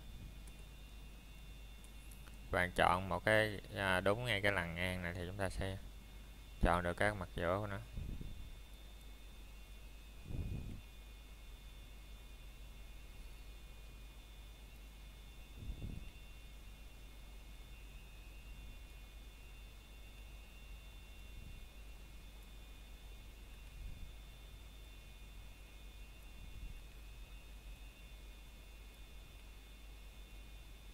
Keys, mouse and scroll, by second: 0.5 Escape, 2.9 a, 7.0 click, 9.3-9.7 scroll down 1, 9.7 shift+middle click, 13.8 scroll down 1, 14.3 shift+middle click, 14.6 scroll up 1, 15.0 shift+middle click, 17.9 b, 19.2 click, 21.4 scroll down 1, 21.7 shift+middle click, 22.0-22.4 scroll up 1, 22.7 b, 25.6 click, 28.2 b, 29.6 click.